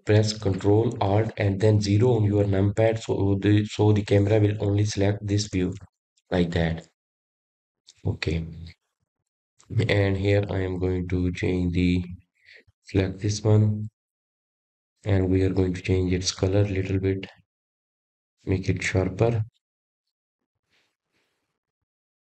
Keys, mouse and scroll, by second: 8.8 ctrl+alt+KP_0, 15.4 click, 17.5 click, 18.7 click.